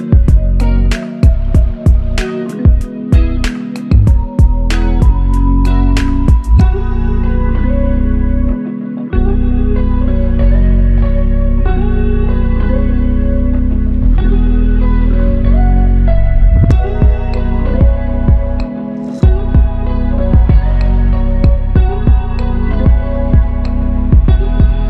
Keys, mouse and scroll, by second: 6.2 alt+click.